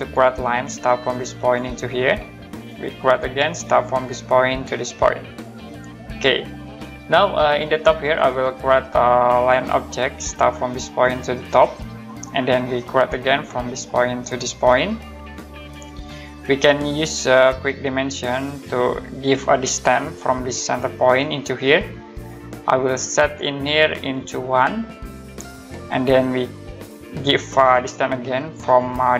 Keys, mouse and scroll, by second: 4.1 click, 6.0 middle click, 7.7 scroll up 1, 9.3 click, 13.8 click, 15.7 click, 17.3 click, 19.4-20.6 scroll up 1, 20.9 click, 24.0 click, 24.5 1, 25.4 click, 27.4 click.